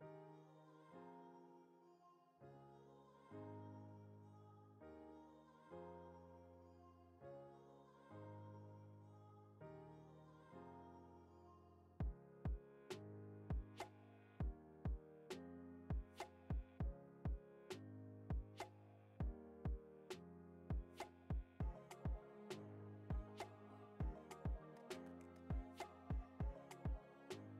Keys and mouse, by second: 0.0 e, 1.7 ctrl+Tab, 2.8 shift+middle drag, 3.5 middle click, 4.3 Tab, 5.2 shift+middle click, 5.6 middle click, 6.8 shift+middle click, 8.3 shift+middle click, 8.8 middle click, 9.3 shift+middle click, 10.0 i, 11.1 middle click, 11.9 e, 13.9 i, 15.0 e, 16.9 ctrl+Tab, 18.4 shift+right click, 19.1 shift+a, 20.8 s, 22.9 middle click, 23.5 g, 24.3 g, 25.4 s, 26.4 g, 27.2 g.